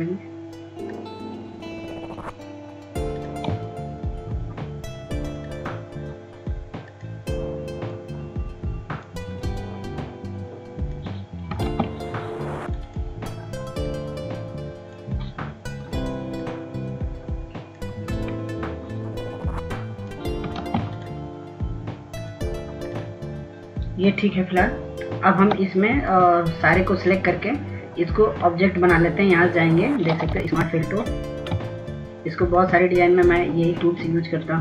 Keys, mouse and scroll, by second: 13.0 ctrl+space, 13.9-19.4 drag, 20.8 click, 21.8 ctrl+space, 22.2-32.9 drag, 31.6 s.